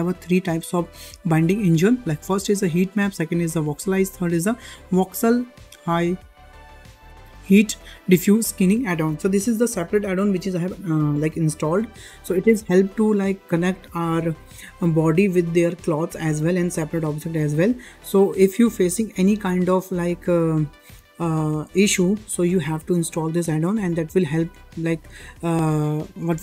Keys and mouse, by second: 2.7-4.1 drag, 5.8 click, 6.5-26.4 drag.